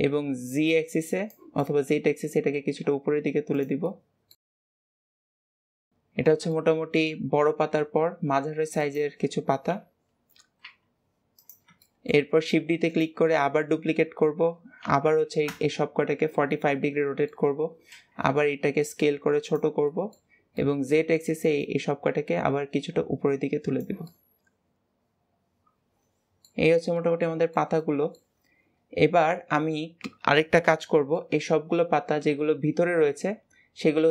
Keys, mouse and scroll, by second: 0.5 click, 1.5-2.5 middle drag, 2.5 s, 3.7-4.6 middle drag, 4.6 click, 5.0-5.6 middle drag, 5.6 KP_7, 6.4-7.1 middle drag, 7.1-7.7 scroll down 2, 7.7 s, 9.5 KP_7, 10.5 s, 11.7-12.3 shift+middle drag, 12.3 shift+d, 14.7 r, 16.3-17.7 middle drag, 17.7 s, 19.7-20.1 middle drag, 20.1-20.5 scroll up 1, 20.5-21.5 middle drag, 21.5 click, 23.9-26.5 middle drag, 26.5-26.9 scroll down 3, 26.9-28.3 middle drag, 28.3-29.1 scroll up 2, 29.1-31.5 middle drag, 31.5-34.1 scroll up 1.